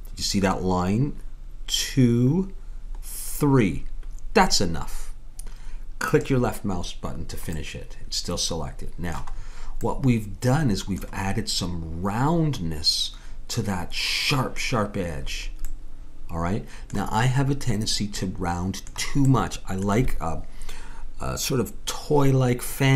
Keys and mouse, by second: 7.5 middle click, 9.3-16.4 middle drag.